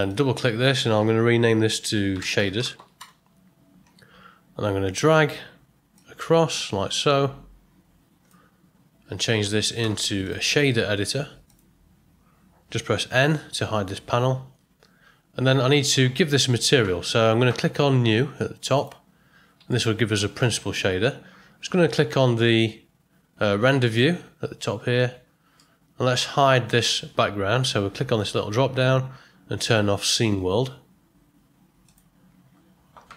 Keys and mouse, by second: 0.1-3.8 drag, 5.9-8.2 drag, 10.2-11.5 drag, 14.1 n, 19.7 ctrl+middle click, 25.5 middle click, 28.1-32.5 drag.